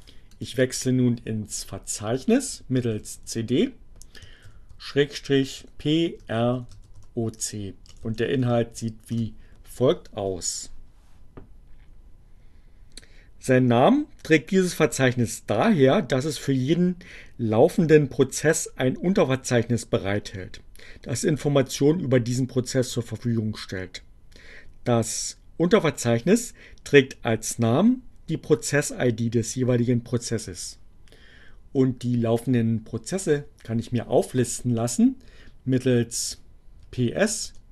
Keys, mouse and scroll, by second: 1.0-1.9 typing, 4.0 shift+7, 4.9 p, 6.1-8.8 typing, 9.0 Return, 32.2 click, 34.7-35.6 typing, 37.3-37.7 typing.